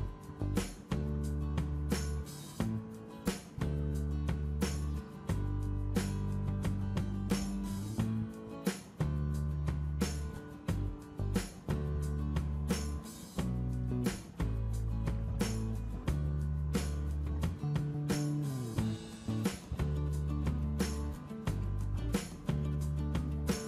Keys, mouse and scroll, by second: 12.5 click, 17.6-23.6 drag.